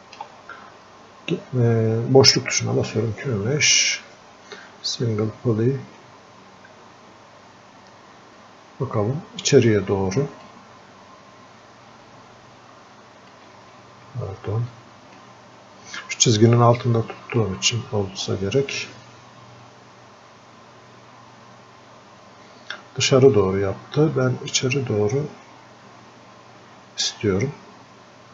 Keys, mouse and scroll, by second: 0.2 space, 7.4 scroll down 1, 8.1 scroll up 1, 10.5 click, 13.7 alt+space, 14.7-17.4 alt+drag, 17.4-18.7 drag, 18.7-28.3 drag.